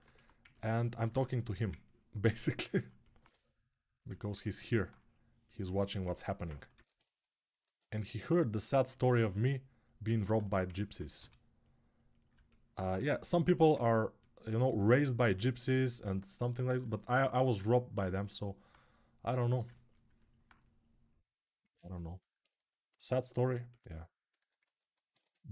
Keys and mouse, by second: 0.8-3.2 alt+shift+drag, 3.9-6.5 ctrl+alt+shift+drag, 6.5 ctrl+r, 6.5-10.3 ctrl+shift+right drag, 10.3-13.5 ctrl+alt+drag, 10.9 g, 13.6 ctrl+alt+click, 13.9-21.8 drag, 21.8-24.7 alt+right drag.